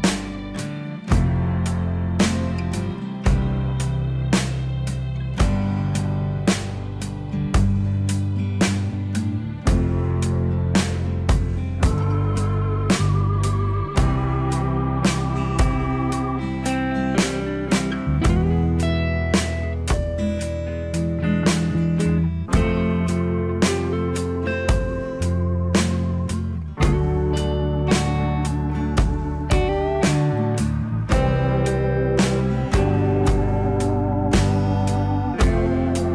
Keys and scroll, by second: 15.4 F4, 26.7 alt+w, 28.4 alt+x, 30.0 alt+w, 31.2 F4, 35.5 alt+w.